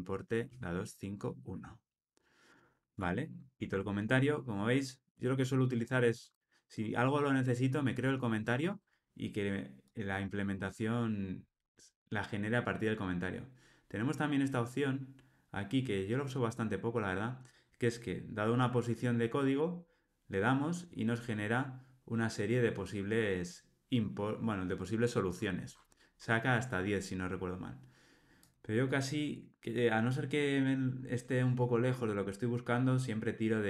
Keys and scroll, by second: 3.5 super+BackSpace.